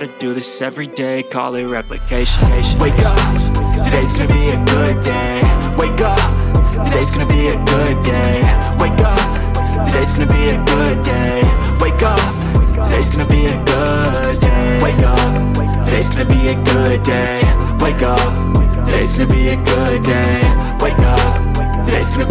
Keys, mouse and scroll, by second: 3.5 Return, 4.5 ctrl+space, 4.6 ctrl+click, 21.8 double click.